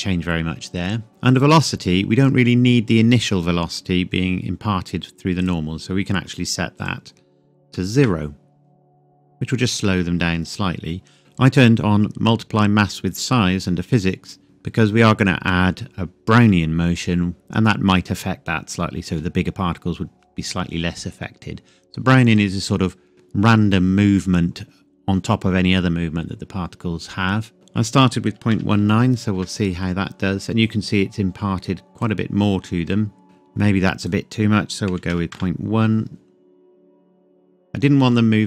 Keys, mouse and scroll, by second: 1.3 click, 2.0-3.8 scroll down 1, 5.4 click, 7.7 KP_0, 9.6 click, 11.6-13.4 scroll down 1, 13.9 click, 15.6-17.5 scroll down 1, 27.5 click, 28.3 KP_Decimal, 28.5 KP_1, 29.3 KP_Enter, 31.9 click, 34.0 click, 34.9 KP_Decimal, 35.1 KP_1, 35.3 KP_Enter, 37.1 click.